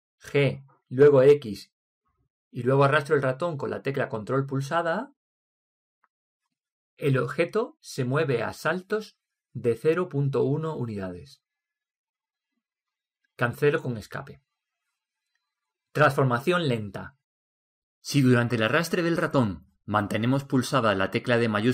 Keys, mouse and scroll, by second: 1.2 g, 18.5-21.7 middle drag.